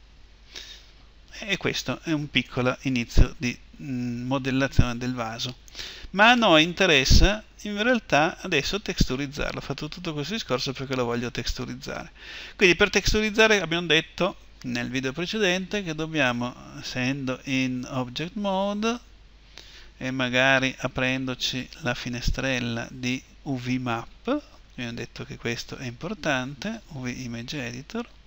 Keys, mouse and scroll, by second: 0.0 Escape, 6.1-9.1 middle drag, 16.7 Tab, 20.3 n, 22.2-28.2 drag.